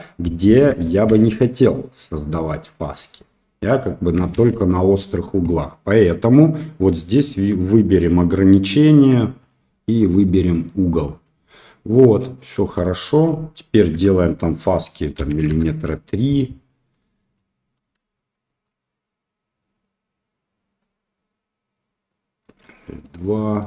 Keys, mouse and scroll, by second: 1.0 shift+z, 4.3 shift+z, 4.7 middle click, 8.3-9.4 drag, 10.1 middle click, 13.2 shift+click, 14.0-16.1 drag, 17.3 middle click, 18.7-22.5 shift+drag, 23.0-23.6 middle drag.